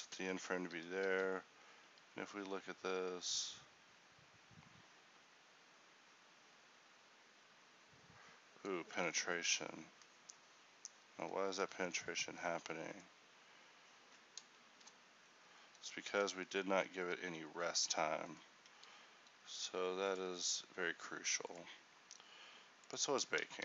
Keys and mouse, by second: 0.3 e, 1.2 alt+a, 11.5 Escape.